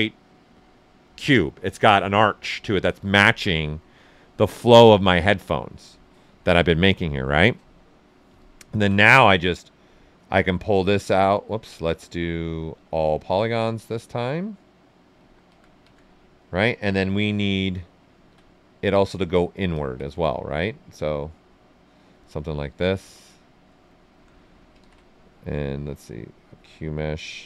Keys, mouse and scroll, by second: 3.3-5.0 right drag, 3.3 typing, 6.8 shift+f, 8.4 typing, 8.4 ctrl+right click, 10.4 click, 11.4 ctrl+z, 12.2 space, 14.6-16.4 drag, 16.4 right click, 18.1 ctrl+z, 18.4 right click, 19.7 ctrl+click, 20.9-22.5 drag, 22.5 right click, 23.4 typing, 24.8 ctrl+z, 25.0 ctrl+right click, 26.4 space.